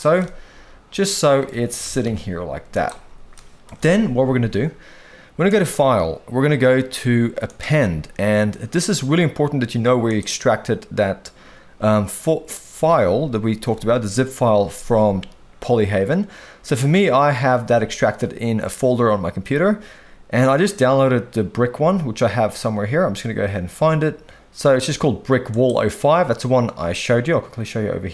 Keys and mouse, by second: 0.1-1.4 middle drag, 1.8 g, 2.0 y, 3.3-3.6 middle drag, 5.4-7.6 drag.